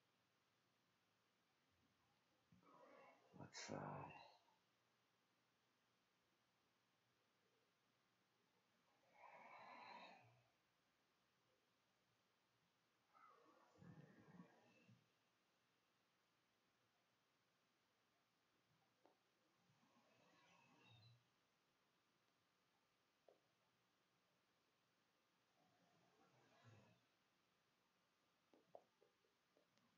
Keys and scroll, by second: 5.1-6.0 typing, 7.5 e, 8.5 w, 10.6-18.8 typing, 20.3 ., 22.2 Tab, 24.3 Tab, 25.8-28.7 typing.